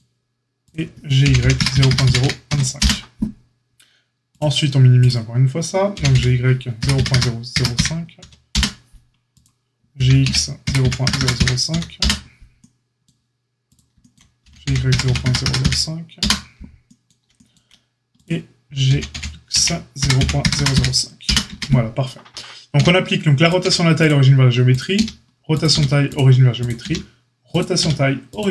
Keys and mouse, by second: 0.6 click, 0.6-4.3 middle drag, 1.1 g, 4.3 click, 5.0-18.1 middle drag, 5.9 g, 9.9 g, 14.4 g, 18.1 click, 18.8-28.5 middle drag, 18.8 g, 21.4 Tab, 22.7 q, 23.6 q, 24.9 q, 25.7 q, 26.5 click, 26.8 q, 27.7 q.